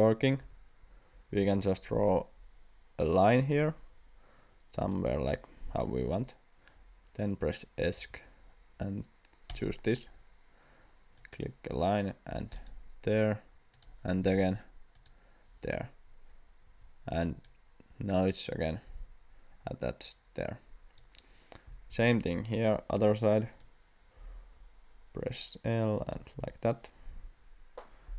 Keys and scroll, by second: 0.4 Delete, 1.4 l, 8.0 Escape, 16.7 Escape, 21.9 l.